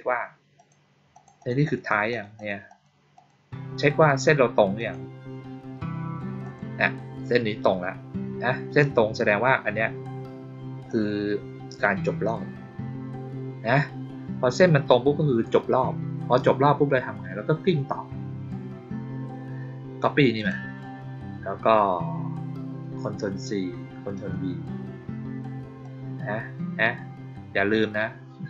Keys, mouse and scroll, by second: 0.5 click, 1.0 click, 1.3 click, 1.5 click, 1.8 click, 2.0 click, 2.3 click, 2.6 click, 3.1 click, 4.7 click, 6.3 click, 10.8-12.2 drag, 20.3 click, 25.7-28.4 drag.